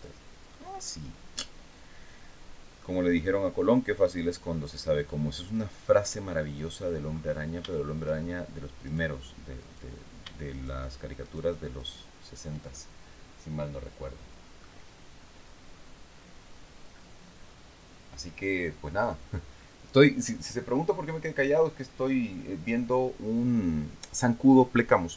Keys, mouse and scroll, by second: 0.2-0.6 scroll up 1, 0.9-2.5 middle drag, 3.7 click, 5.0 right click, 6.0 right click, 7.2 shift+middle click, 8.3 right click, 9.1 right click, 10.0 shift+right click, 10.7 shift+right click, 11.3 shift+right click.